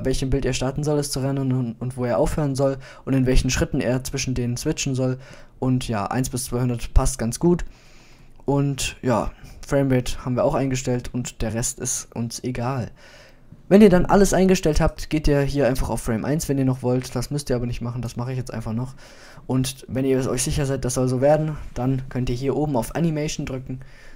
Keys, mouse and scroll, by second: 7.2-9.4 middle drag, 14.4 drag, 24.1 click.